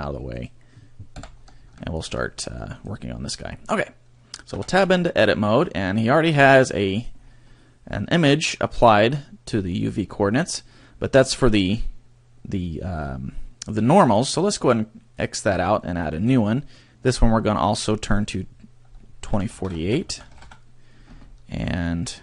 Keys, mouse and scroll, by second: 0.5 right click, 1.4 scroll down 3, 1.8 shift+middle click, 2.2 middle click, 2.8 right click, 4.8 Tab, 6.4 click, 7.3 scroll down 2, 7.5 middle click, 9.8 scroll up 1, 15.1 click, 16.1 click.